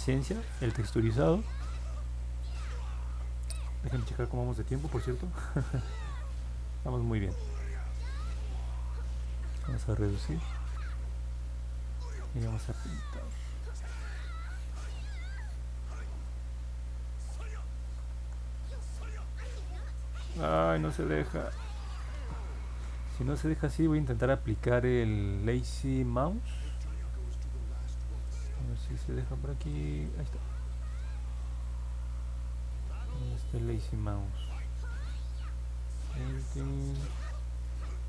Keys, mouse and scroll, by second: 5.4 click, 8.1 click, 9.2-10.4 drag, 14.5 click, 16.9 click, 18.0 ctrl+z, 19.6 click, 20.3 ctrl+z, 22.0 click, 22.6 ctrl+z, 29.2 click, 30.0-33.7 drag.